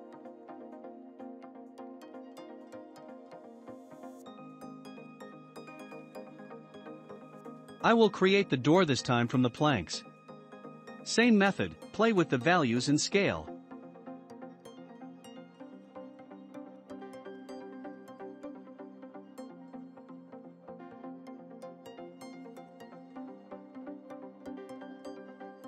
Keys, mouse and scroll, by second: 1.5 scroll down 2, 2.2 middle click, 2.2-3.0 scroll down 4, 3.0 shift+middle click, 3.5-4.1 drag, 4.1 shift+middle click, 4.9 click, 5.3-5.6 scroll down 1, 5.6-7.2 shift+middle drag, 7.2 shift+d, 9.0-9.4 shift+middle drag, 9.4-9.8 scroll up 2, 11.6-17.2 drag, 17.2 scroll up 1, 17.3 middle click, 18.3 s, 20.3-21.5 shift+middle drag, 21.5 scroll up 2, 22.7 click.